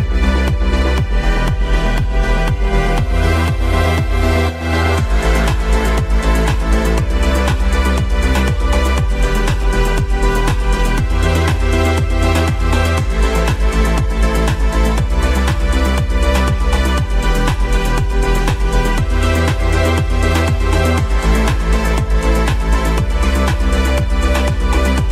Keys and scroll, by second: 1.5 shift+F2, 1.9 Escape, 8.8 shift+Page_Down, 12.0 shift+F2, 13.4 F3.